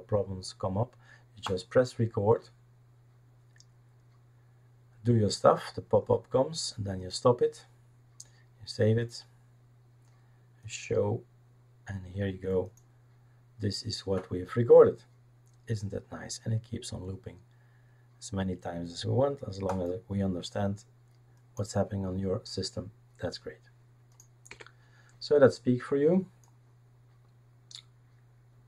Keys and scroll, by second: 24.5 Delete.